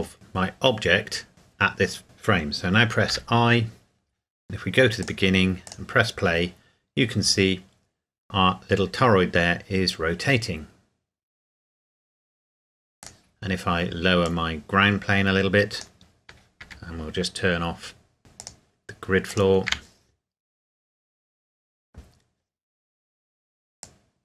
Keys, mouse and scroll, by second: 3.1 KP_Enter, 5.0 click, 13.0 right click, 14.2 click, 16.6 n, 17.2 scroll down 1, 18.4 click, 19.7 n, 23.8 click.